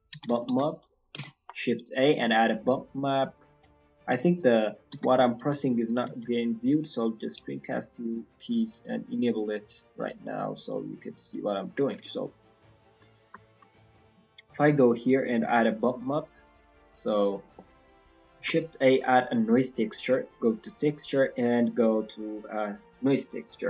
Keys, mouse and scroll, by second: 10.2 click, 10.8 scroll down 4, 11.0 scroll up 3, 11.2-11.6 scroll down 1, 11.6 scroll down 1, 12.2 scroll up 1, 12.9-13.6 scroll up 3, 13.9 shift+middle click, 14.3-14.6 scroll up 2, 15.0 scroll down 1, 15.2 middle click, 15.6 click, 16.9 scroll down 2, 17.2 middle click, 18.3 shift+a.